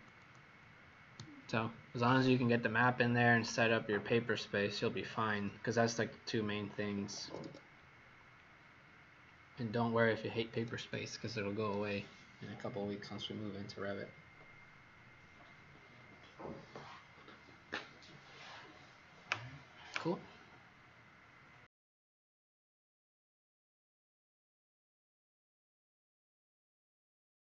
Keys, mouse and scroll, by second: 6.9 Escape, 7.2 Escape, 7.4 Escape, 7.9 scroll down 1, 9.7 scroll up 1.